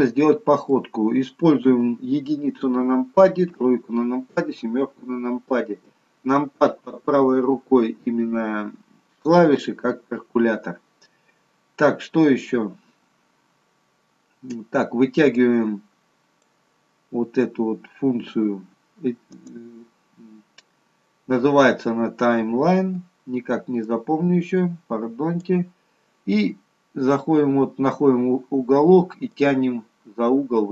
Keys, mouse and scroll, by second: 1.6 KP_1, 3.4 KP_3, 4.2 KP_7, 5.8 KP_1, 15.4 click, 19.4 click, 23.8 click, 29.2 click.